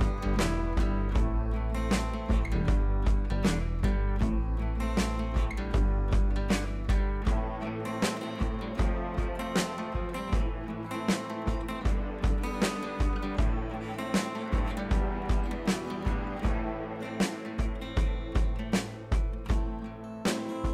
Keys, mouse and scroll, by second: 1.7 ctrl+c, 2.6 click, 4.7 ctrl+v, 5.7-9.3 drag, 10.0 ctrl+c, 12.2 click, 13.4 ctrl+v, 15.2-17.7 drag, 18.9 ctrl+c, 20.2 click.